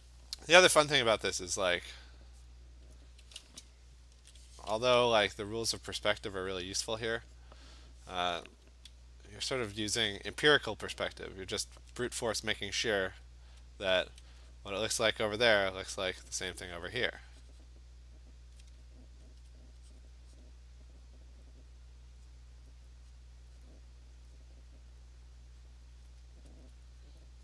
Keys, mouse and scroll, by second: 1.1 alt+click, 1.3 alt+click, 2.2 click, 2.4 click, 2.9 click, 4.2 ctrl+z, 4.8 ], 5.1 ], 5.9 click, 6.4 click, 6.9 click, 7.4 click, 9.6 alt+click, 9.8 alt+click, 10.4 click, 10.8 click, 11.3 click, 14.0 alt+click, 14.6 click, 14.8 click, 15.2 click, 15.5 click, 16.0 click, 16.3 click, 16.4 alt+click, 16.5 click, 16.8 click, 17.6 click, 19.4-24.5 alt+click, 20.0 click, 20.4 click, 20.8 click, 21.0 click, 21.7 click, 22.3 click, 22.6 click, 23.2 click, 23.6 click, 24.4 click, 25.5 click, 25.8 click, 26.1 click, 26.6 alt+click, 27.2 click.